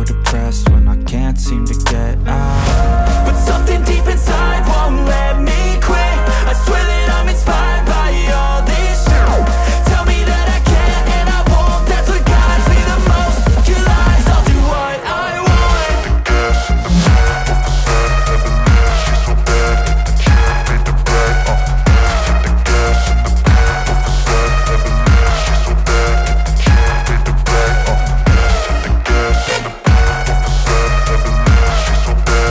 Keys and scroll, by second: 0.0-1.1 typing, 0.5 Return, 9.9 space, 10.0 KP_Subtract, 10.5 space, 10.8 KP_3, 17.2 BackSpace, 18.2 ctrl+s.